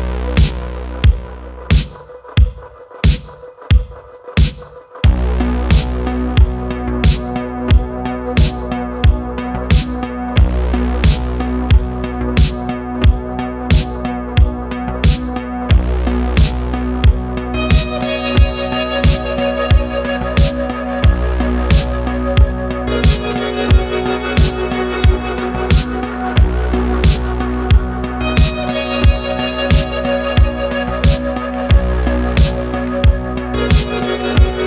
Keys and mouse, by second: 0.2 middle drag, 0.8 click, 3.3 shift+click, 4.2 middle click, 5.0 ctrl+p, 10.3-10.8 middle drag, 12.0-12.8 drag, 13.6 middle drag, 14.4 click, 14.8-15.6 middle drag, 16.5 alt+a, 16.8 middle drag, 16.9 click, 17.5 click, 18.5 click, 19.1 middle drag, 19.9 click, 20.3-21.1 middle drag, 21.3 g, 22.8 click, 23.0-23.8 middle drag, 24.0 middle click, 24.3 g, 25.1 click, 25.3-25.9 middle drag, 26.1 middle click, 27.1 middle click, 28.2 click, 30.8 click, 31.9-32.3 middle drag, 32.7 click, 33.4-34.1 middle drag, 34.5 g.